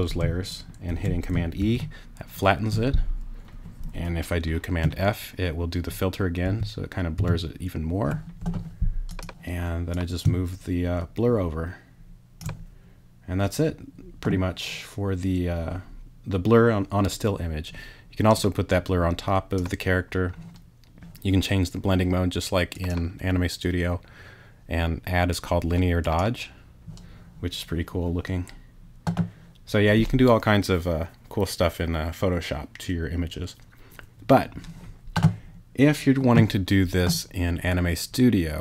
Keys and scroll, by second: 1.6 super+e, 6.4 super+f.